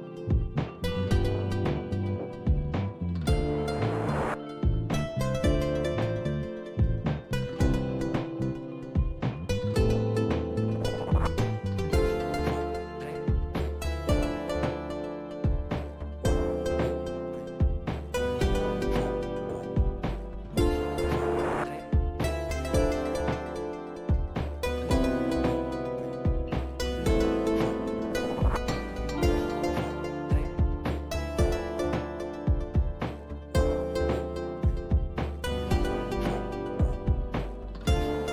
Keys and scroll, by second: 0.0-6.6 typing, 8.5-27.8 typing.